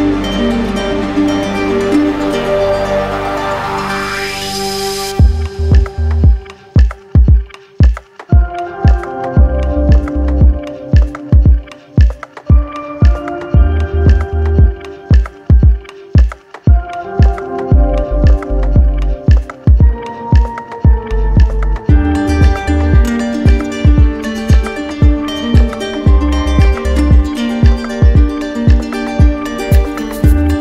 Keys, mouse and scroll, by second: 3.3-4.6 drag, 5.6 click, 6.1 click, 6.5 click, 8.1 click, 8.8 right click, 10.1 right click, 11.6-12.6 drag, 13.4-14.4 drag, 16.6-17.7 drag, 18.0 2, 19.8 Return, 22.7-23.8 drag, 24.2-25.2 drag, 26.8-27.8 drag, 28.4-29.5 drag, 30.3 right click.